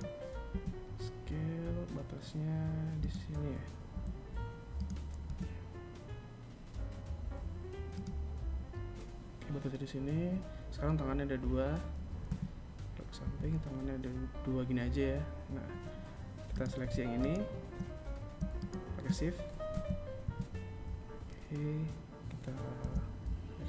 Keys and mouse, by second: 2.0 g, 3.3 r, 10.4 KP_3, 11.3 KP_1, 14.6 right click, 15.3 right click, 16.6 shift+right click, 17.8 KP_3, 18.3 KP_1, 20.9 e.